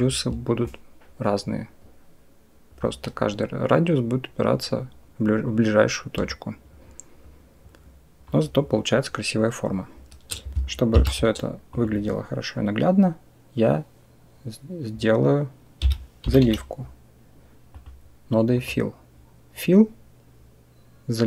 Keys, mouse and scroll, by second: 0.5-2.6 shift+drag, 6.1-8.1 shift+drag, 10.8 shift+a.